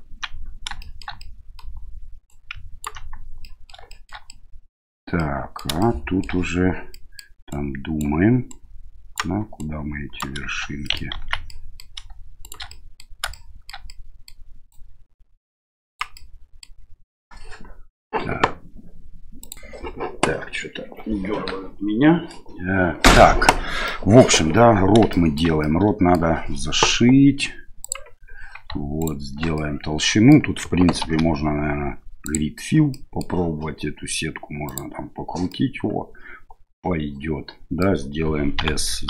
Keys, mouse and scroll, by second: 0.8 shift+middle click, 1.3 middle click, 2.3 ctrl+right click, 3.5 middle click, 3.9 shift+middle click, 4.3 middle click, 5.2 middle click, 5.9 shift+middle click, 7.0 middle click, 7.5 right click, 8.5 right click, 9.6 right click, 10.9 middle click, 11.1 ctrl+z, 11.5 middle click, 12.4 right click, 12.7 middle click, 13.3 middle click, 13.9 middle click, 14.7-16.0 drag, 16.2 middle click, 23.9 middle click, 25.1 shift+middle click, 25.6 middle click, 27.9 click, 29.0 alt+right click, 29.5 middle click, 31.0 ctrl+f, 32.9 middle click, 34.7 click, 35.5-37.8 middle drag, 38.5 s.